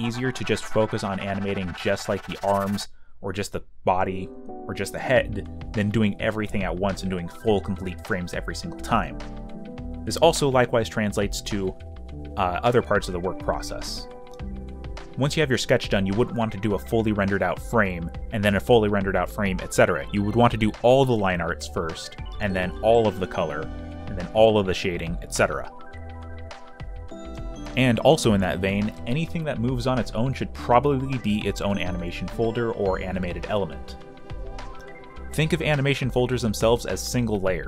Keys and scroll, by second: 0.0-1.1 typing, 2.3-6.1 typing, 9.1 q, 10.3 b, 10.5 space, 13.0 b, 16.6-18.2 typing, 19.7 alt+f, 22.1-24.1 typing, 25.9 space, 28.4-29.4 typing, 31.6 b, 34.0 space, 34.0 b, 34.6 y.